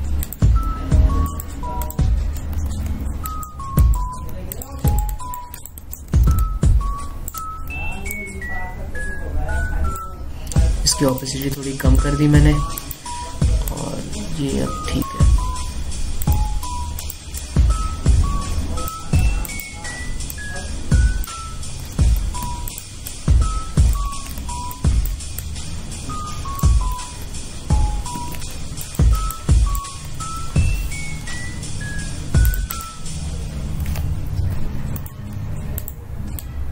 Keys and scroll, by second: 0.2 ctrl+z, 3.7 ctrl+z, 7.3 space, 20.0 ctrl+z, 23.0 ctrl+z, 25.2 ctrl+z, 29.0 ctrl+z, 31.1 ctrl+z, 35.6 e.